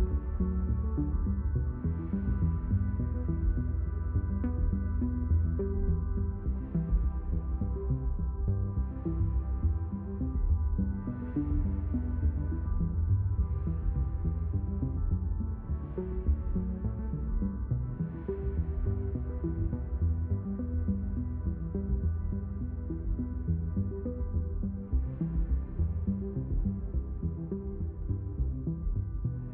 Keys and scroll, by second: 8.7 space, 14.7 space, 19.4 space, 25.6 space.